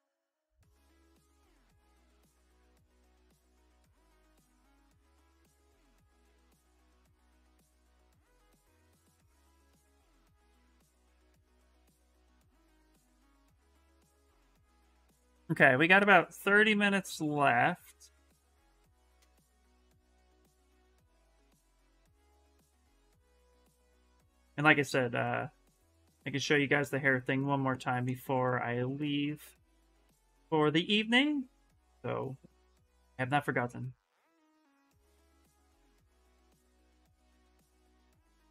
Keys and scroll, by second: 1.5 ctrl+z, 1.8 ctrl+z, 2.0 ctrl+z, 2.2 ctrl+z, 2.5 ctrl+z, 2.8 ctrl+z, 3.2 ctrl+z, 10.6 s, 13.9-14.8 typing, 20.7-23.6 typing, 34.9 ctrl+z, 35.0 ctrl+z, 35.3 s, 37.7 ctrl+z, 37.9 s.